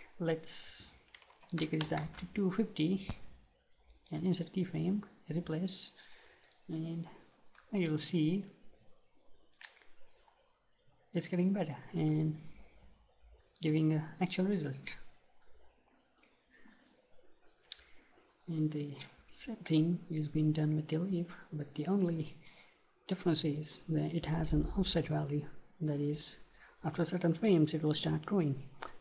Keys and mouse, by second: 3.9-5.8 right drag, 6.5-14.9 right drag, 14.9-26.1 middle drag, 27.1-28.9 right drag.